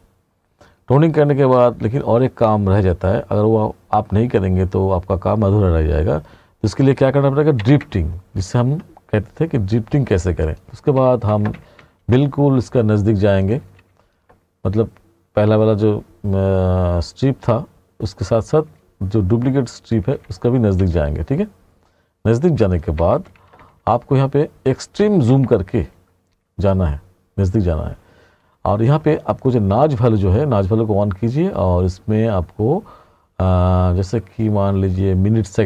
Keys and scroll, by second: 8.1 ctrl+=, 11.0 t, 13.7 t, 18.8 t, 20.2 t, 23.0 t.